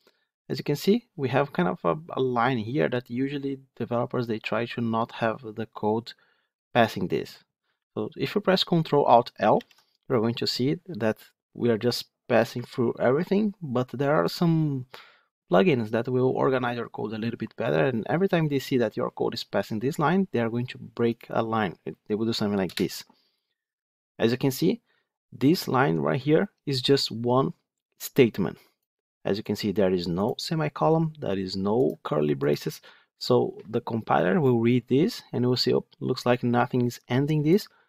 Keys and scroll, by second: 9.5 ctrl+alt+l.